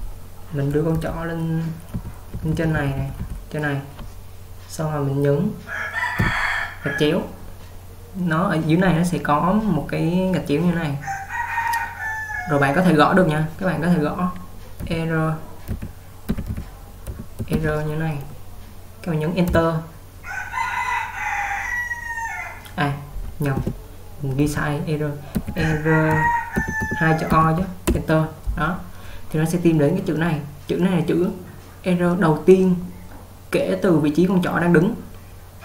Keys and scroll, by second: 1.1-3.7 typing, 6.0-6.5 typing, 14.9-18.1 typing, 19.6 Return, 23.7 /.